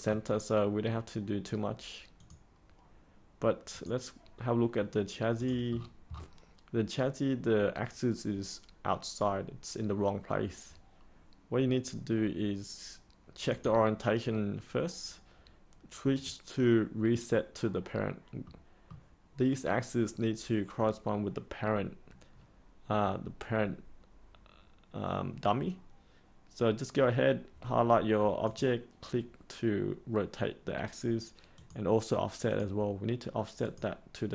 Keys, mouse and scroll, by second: 2.1-4.8 drag, 5.7 scroll down 1, 13.5 click, 18.4 middle click, 28.4-34.3 drag.